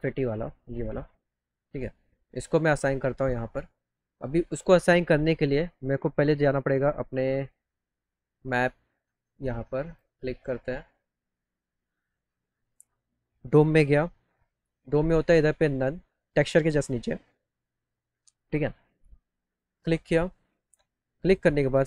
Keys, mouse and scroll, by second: 0.3 click, 1.6 click, 1.9 right click, 2.6 click, 3.6 click, 9.8 click, 19.4 click, 21.2 click.